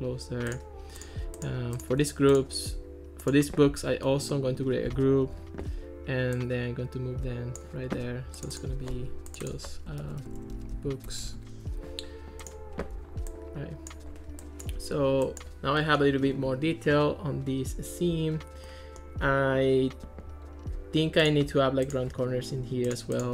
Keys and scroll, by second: 5.3 super+g, 9.8-11.3 typing, 11.4 Return.